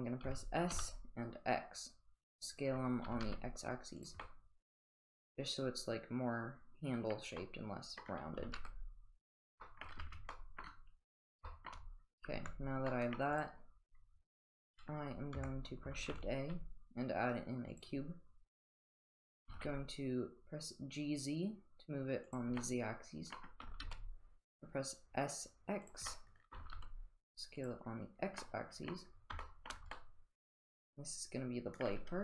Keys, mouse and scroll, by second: 0.2 s, 3.0 s, 4.2-7.1 middle drag, 7.4 middle click, 8.0 middle click, 8.4 s, 9.6 middle drag, 10.0 Tab, 10.3-10.6 middle drag, 11.4 shift+middle drag, 12.3 Tab, 12.9 middle drag, 15.3 Tab, 16.0 shift+a, 19.4 g, 22.6-23.4 middle drag, 23.6 s, 26.1-26.5 middle drag, 28.3 s, 28.4-28.8 middle drag, 29.4 shift+middle drag, 29.9-31.8 middle drag.